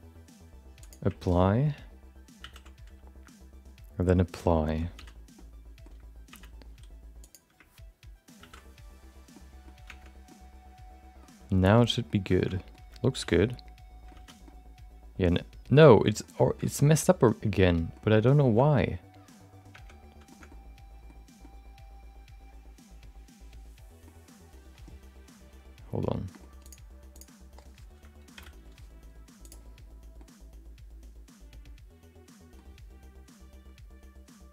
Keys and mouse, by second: 2.7 ctrl+a, 4.9 alt+z, 5.3 middle click, 6.3 alt+z, 8.6 ctrl+a, 9.3 middle click, 9.9 Tab, 10.2 middle click, 11.7 middle click, 12.3 shift+middle click, 12.5 middle click, 13.2 alt+z, 13.3 middle click, 14.1 alt+z, 14.4-15.7 middle drag, 15.9 shift+middle click, 16.0 middle click, 16.4 shift+middle click, 16.6 middle click, 17.3 middle click, 18.4 shift+middle click, 18.6 middle click, 20.0 Tab, 20.2 shift+middle click, 20.5 middle click, 21.4-24.0 middle drag, 26.3 middle click, 27.1 click, 28.3 alt+p, 30.1-32.5 middle drag.